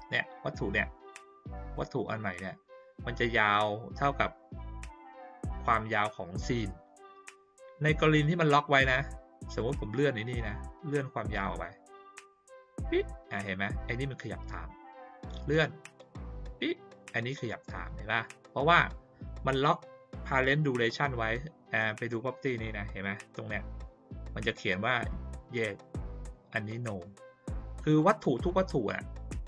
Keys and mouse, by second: 9.5 click, 10.9-12.4 drag, 15.3-16.2 drag, 18.7 click, 27.8 click, 28.3 click.